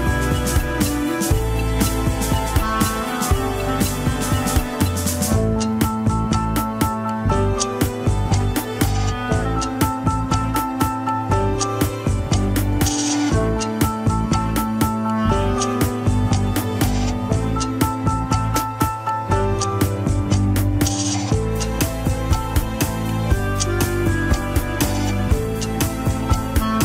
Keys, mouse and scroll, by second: 0.1-2.6 middle drag, 2.6 ctrl+click, 2.9-5.5 middle drag, 5.5 ctrl+click, 7.0 ctrl+click, 7.3-8.7 middle drag, 8.7 click, 9.0-9.5 scroll up 1, 9.5 click, 10.2 scroll down 2, 10.4-13.0 middle drag, 13.0 alt+z, 13.2 middle click, 14.0 scroll down 2, 14.1 KP_1, 14.4 ctrl+Tab, 15.3 ctrl+s, 15.7 scroll down 4, 16.5 click, 16.8 scroll down 1, 17.6 ctrl+Tab, 18.0 a, 18.7 KP_3, 19.0 scroll up 1, 19.4 alt+z, 19.7 click, 20.5 r, 26.7 ctrl+Tab.